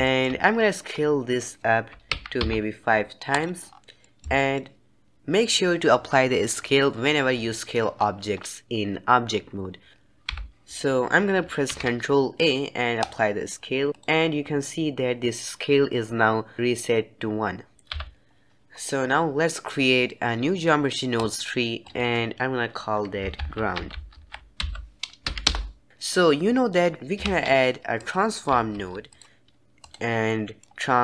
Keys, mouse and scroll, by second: 0.4-0.7 scroll down 4, 0.7-2.0 scroll up 2, 2.0 s, 3.6-3.9 scroll down 3, 3.9-7.3 middle drag, 7.9-8.4 scroll down 2, 8.4-9.9 scroll up 2, 9.9 ctrl+a, 10.2 n, 11.6 ctrl+a, 17.8 n, 18.6-21.1 scroll down 1, 21.1-24.9 drag, 26.9 shift+a, 27.2 shift+a, 30.2 middle click.